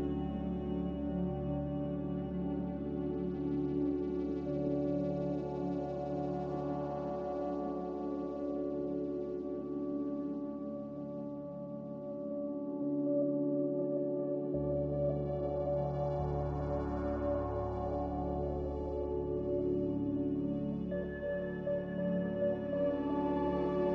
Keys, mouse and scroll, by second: 0.0-2.8 typing, 3.9-5.0 typing, 7.6 z, 10.0-10.9 typing, 12.5 a.